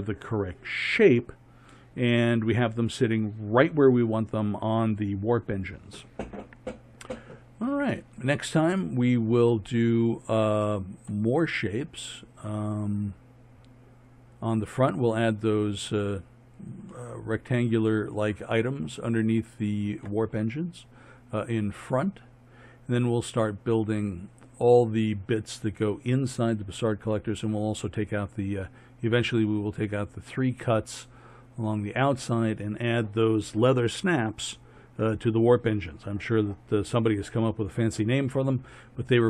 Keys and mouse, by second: 6.9 middle click, 7.3-9.6 middle drag, 11.2 middle drag, 11.7 middle click, 11.9 middle click, 12.1 middle click, 12.3 middle click, 18.8 middle click, 20.8-39.2 middle drag.